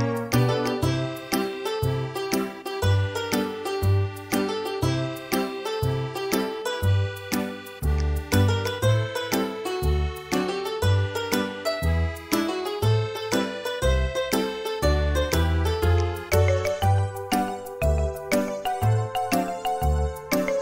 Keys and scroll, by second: 0.2 typing, 2.8 space, 9.2 e, 9.7 space, 10.5 m, 12.9 typing, 18.1 space, 20.4 p.